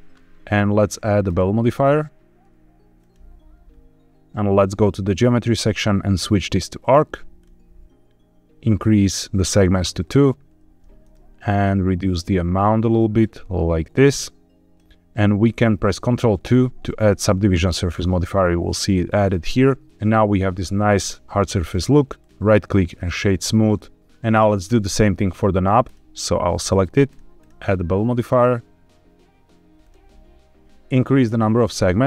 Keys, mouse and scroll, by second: 1.2-3.1 drag, 4.6 click, 5.6-6.9 drag, 7.3-8.6 scroll up 1, 9.5 click, 11.1-14.7 shift+drag, 16.6 ctrl+2, 17.8 scroll down 2, 22.1-23.0 right drag, 25.8 click, 27.0-29.8 drag, 30.6 click, 31.2 click.